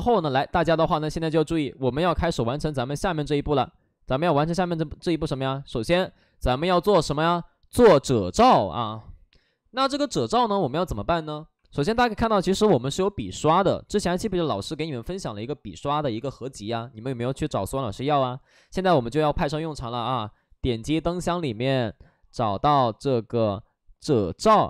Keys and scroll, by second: 3.3 ctrl+z, 4.6 ctrl+d, 5.2 ctrl+d, 6.1 alt+s, 6.5 alt+s.